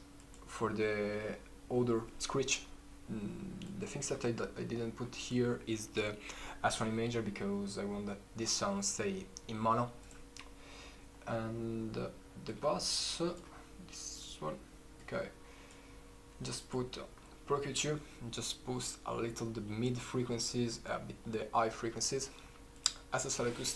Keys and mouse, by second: 3.9 click, 9.0-9.5 drag, 10.4 drag, 11.0-23.7 drag.